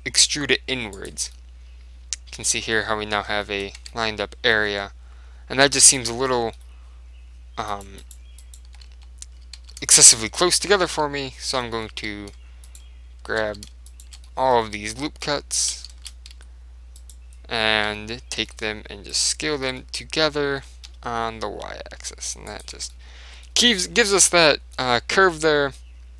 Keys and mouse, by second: 1.3 Tab, 1.4-3.1 middle drag, 3.5-5.9 middle drag, 3.9 Tab, 5.9 click, 6.4-8.0 middle drag, 7.8-12.0 right drag, 8.0 middle click, 9.0 z, 9.7 z, 11.0 z, 11.7-13.6 middle drag, 12.0 z, 12.8-15.9 right drag, 13.6 z, 14.3-15.7 middle drag, 14.9 ctrl+z, 16.0 ctrl+shift+z, 16.4 s, 17.2-18.9 right drag, 18.0 z, 18.5 s, 19.3-21.0 right drag, 19.8 s, 22.7 click, 22.9 Tab, 24.2 click, 24.2-26.1 middle drag.